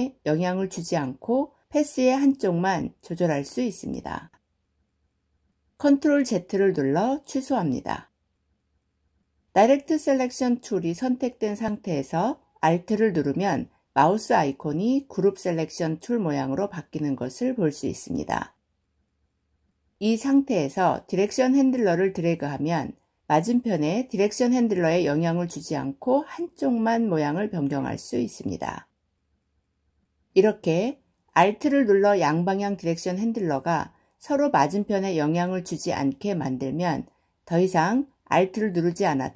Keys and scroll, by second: 5.6 ctrl+z.